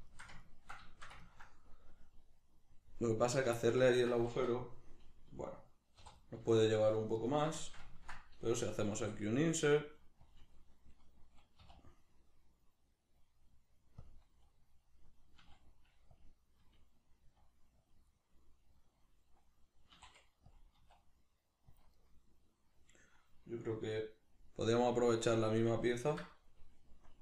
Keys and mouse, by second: 0.1-3.3 shift+middle drag, 3.3 right click, 3.6-6.2 ctrl+shift+middle drag, 6.0 3, 6.2 right click, 6.5 shift+right click, 6.7 shift+right click, 7.2 shift+right click, 7.6-10.3 shift+middle drag, 8.9 i, 10.3 click, 11.6 w, 16.2 click, 16.6 g, 17.9 click, 18.1-20.6 middle drag, 19.9 e, 20.6 click, 20.8 s, 21.8 click, 21.9-27.2 middle drag.